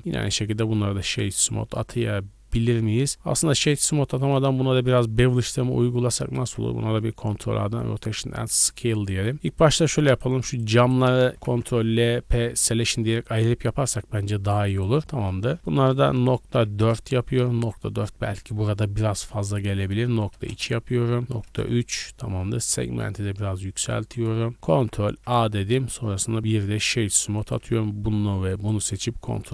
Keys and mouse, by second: 0.0 w, 1.1-2.7 drag, 2.6 ctrl+z, 3.0 drag, 5.2-9.5 drag, 6.4 ctrl+a, 9.3 Tab, 9.5 middle click, 10.1 shift+click, 10.1 shift+right click, 11.3 ctrl+l, 12.0 p, 12.9 Tab, 13.2 middle click, 13.3-23.4 drag, 24.6 ctrl+a, 26.0 w, 27.4 middle click, 28.5 shift+middle click.